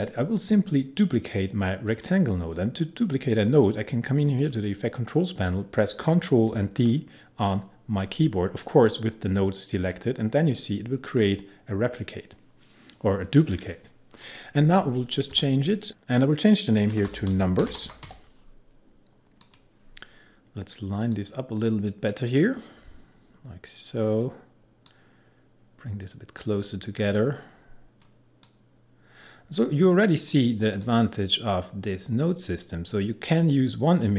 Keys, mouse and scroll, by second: 2.0 click, 4.4 click, 6.5 ctrl+d, 14.2 click, 15.9 Return, 16.7-18.6 typing, 19.4-34.1 drag.